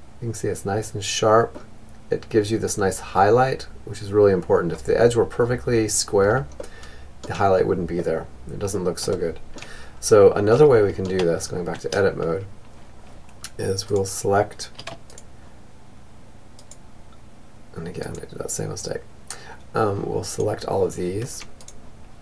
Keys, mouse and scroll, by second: 5.1-7.4 middle drag, 7.4 middle click, 9.5 Tab, 12.4-18.2 right drag, 18.6-22.0 right drag.